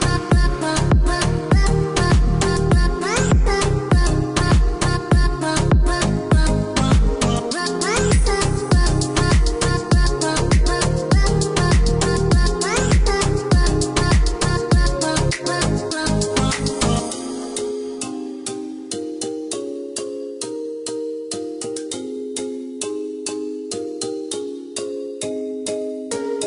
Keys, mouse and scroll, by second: 2.2 click, 2.8 click, 3.4 click, 13.7 scroll down 1.